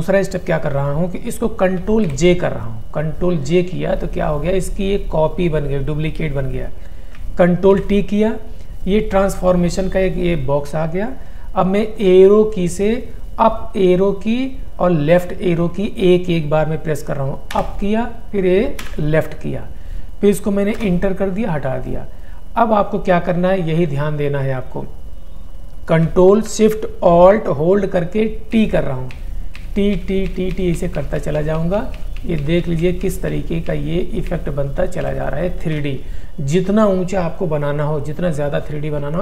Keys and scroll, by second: 2.1 ctrl+j, 7.7 ctrl+t, 17.5 Up, 18.9 Left, 20.8 Return, 28.6 ctrl+shift+a.